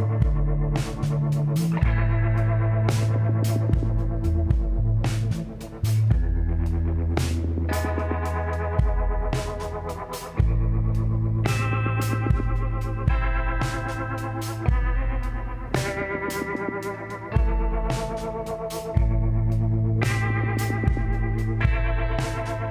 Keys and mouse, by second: 1.9-3.6 drag, 3.5 e, 10.1-11.6 middle drag, 11.6 ctrl+KP_Add, 12.8 s, 15.1 ctrl+KP_Add, 16.2 s.